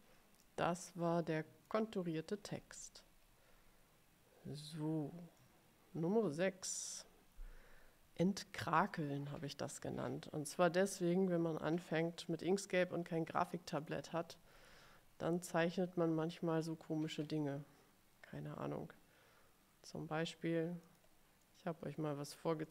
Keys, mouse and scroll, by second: 0.5 middle click, 0.5-0.9 scroll down 1, 1.0 click, 1.1 middle click, 2.5-3.6 scroll down 2, 5.5-7.0 middle drag, 13.9 click, 21.0 click, 21.5-22.7 middle drag.